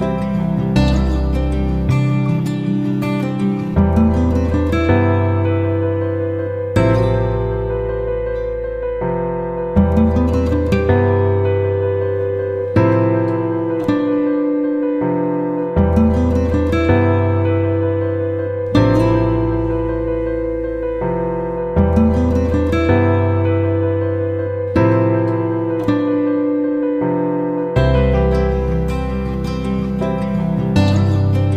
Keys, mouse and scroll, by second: 1.1 F9, 1.9 click, 3.7 click, 7.7 F9, 9.3-15.2 drag, 15.3 F9, 15.6-18.3 drag, 21.1 F9, 21.8 click.